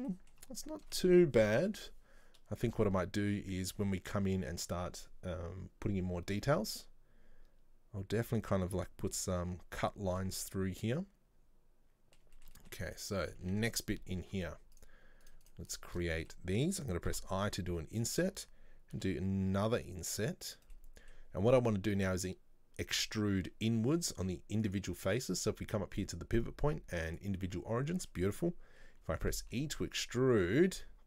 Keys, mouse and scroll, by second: 0.0-0.6 shift+middle drag, 0.6 scroll up 1, 1.1-4.1 middle drag, 4.5-7.5 shift+middle drag, 10.3-13.0 middle drag, 13.0 right click, 13.3 middle click, 13.6 Tab, 13.8-14.9 scroll up 2, 14.9 click, 15.4 right click, 15.6 shift+right click, 16.1-17.2 middle drag, 17.2 typing, 20.9-23.9 middle drag, 24.8-27.8 drag, 28.2-29.6 middle drag, 29.6 e.